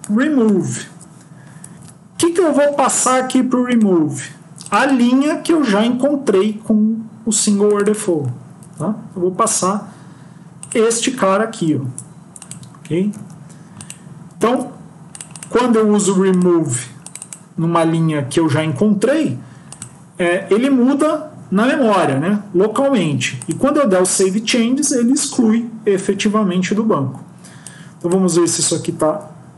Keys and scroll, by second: 1.6 End, 8.6 ctrl+c, 11.2 ctrl+v, 13.0 ctrl+x, 14.4 ctrl+s.